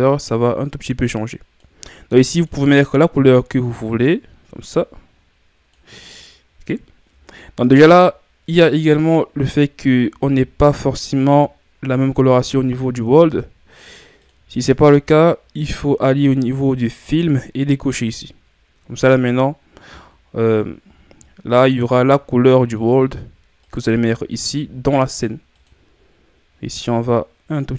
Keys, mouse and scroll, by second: 6.2-13.0 middle drag, 18.1 click, 20.5-24.5 middle drag, 24.5 click, 26.9 click.